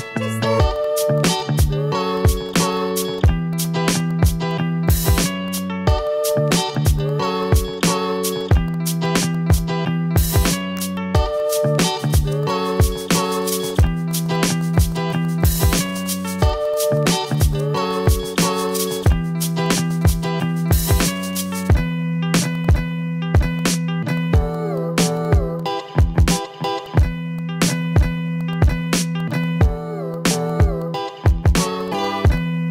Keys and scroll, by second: 2.3 Delete, 5.0 ctrl+z, 6.9 v, 13.6 a, 16.3 a, 20.0 ctrl+z, 22.1 v, 24.4 ctrl+z, 25.0 ctrl+z, 26.2 a, 26.5 Delete, 28.3 v, 30.0 ctrl+z, 30.7 ctrl+z, 31.6 a.